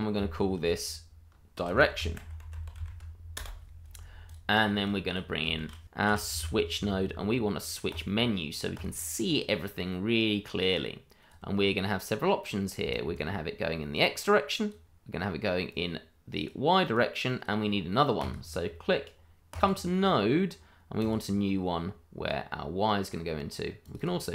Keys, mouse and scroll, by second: 1.5-2.7 typing, 3.3 Return, 4.2 click, 5.6 shift+a, 6.0 s, 6.2 w, 7.9 click, 12.9 ctrl+right click, 12.9 right click, 13.1 ctrl+right click, 13.9 click, 24.0 double click.